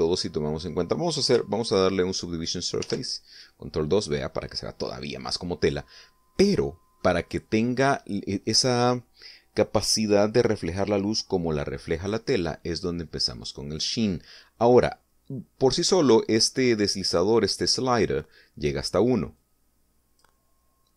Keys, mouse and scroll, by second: 3.8 ctrl+2, 7.0 middle click, 7.7 middle click, 20.3 click.